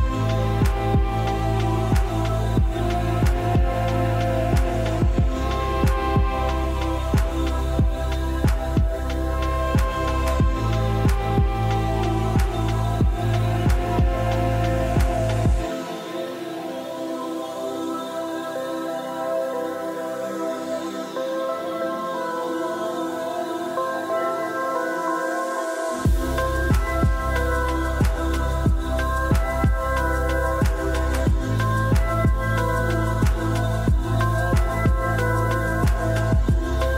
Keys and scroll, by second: 7.3 r, 10.7 typing, 20.3-21.9 typing, 26.2 r, 33.7 Return, 33.7 typing.